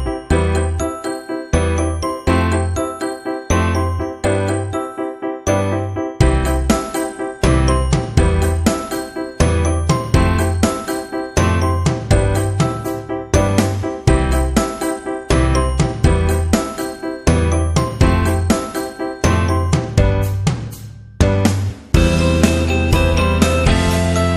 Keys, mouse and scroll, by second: 3.3-3.7 scroll up 1, 4.5-5.0 scroll up 2, 7.0 click, 8.5 right click, 10.0 click, 11.0 click, 12.3 [, 13.8 ], 14.0 ], 14.8 click, 14.8 click, 17.1 ], 17.7 click, 19.5 scroll down 1, 20.4-20.8 scroll down 1, 21.9 click, 22.9-23.6 scroll down 2, 23.9-24.2 scroll down 1, 24.2 space.